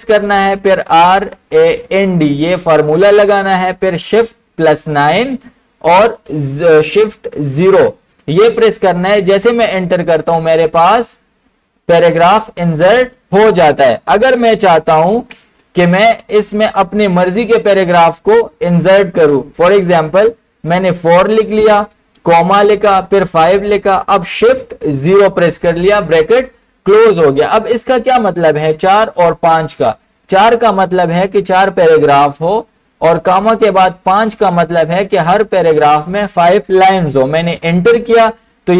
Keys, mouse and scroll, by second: 0.0-2.3 typing, 4.4 shift+Num_Lock, 4.5-5.3 typing, 7.6 shift+0, 9.2 typing, 9.4 Return, 13.0 click, 14.4 Return, 15.2 ctrl+z, 16.6 click, 19.2 BackSpace, 21.0 4, 22.2 ,, 23.3 5, 25.1 shift+0, 37.6 shift+0, 37.7 Return.